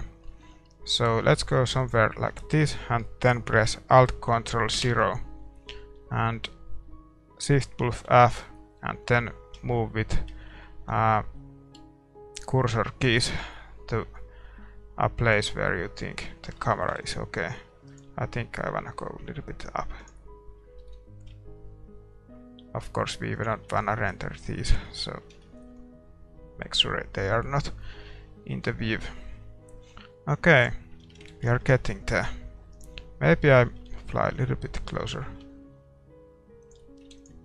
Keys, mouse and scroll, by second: 2.1 ctrl+s, 2.1-4.8 middle drag, 4.8 ctrl+alt+KP_0, 5.6-7.9 scroll up 1, 7.9-8.3 scroll up 1, 8.1 shift+f, 16.6-18.5 middle drag, 17.9 ctrl+s, 17.9-19.7 right drag, 18.5 g, 20.8 r, 23.7-26.7 middle drag, 25.5 shift+z, 26.7-27.3 scroll up 1, 28.6-30.6 middle drag, 30.8-32.8 drag, 31.2 shift+z, 31.8 ctrl+s, 31.8-33.7 middle drag, 32.8-34.5 right drag, 33.7 shift+f.